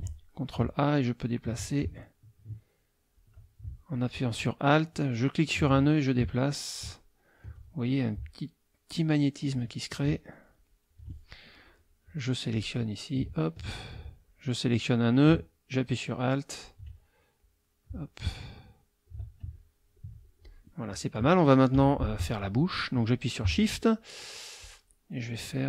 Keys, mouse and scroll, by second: 0.6-3.4 ctrl+drag, 3.6 alt+click, 4.5-6.9 alt+drag, 7.3 alt+click, 7.6-9.2 alt+drag, 9.6-11.1 alt+drag, 11.7 click, 13.3 alt+click, 14.2-16.9 alt+drag, 17.4-19.2 drag, 19.8 ctrl+click, 20.4 ctrl+click, 21.7 F6, 24.6-25.0 shift+drag, 25.5-25.6 shift+drag.